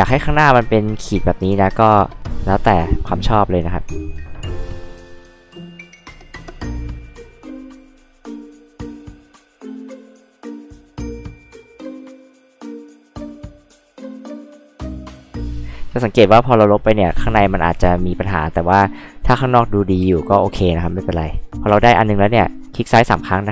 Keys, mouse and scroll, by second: 1.6 click, 1.8-2.2 scroll up 4, 2.2-2.5 scroll down 2, 2.7 click, 3.8 click, 4.4 click, 5.1 scroll up 2, 5.8 click, 6.3 click, 6.6 click, 6.8 click, 7.1 e, 7.5 click, 7.7 click, 8.0 click, 8.4 click, 8.9 h, 9.0 click, 9.2 e, 9.5 click, 9.8 click, 10.0 click, 10.5 click, 10.7 click, 11.1-12.1 typing, 11.4 click, 11.7 click, 11.9 click, 12.2 click, 12.4 click, 12.7 click, 12.9 click, 13.3 h, 13.3 click, 13.7 click, 14.7 e, 14.8 click, 15.1 click, 15.4 click, 16.8 click, 17.5 click, 17.9 click, 20.0 h, 20.2 click, 21.7 space, 21.7 click, 22.3 click, 22.5 click, 23.2 right click.